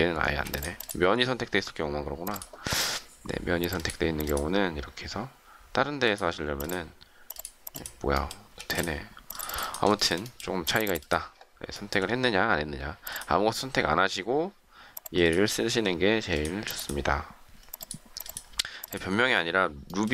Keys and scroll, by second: 0.2 space, 8.6 space, 18.6 space.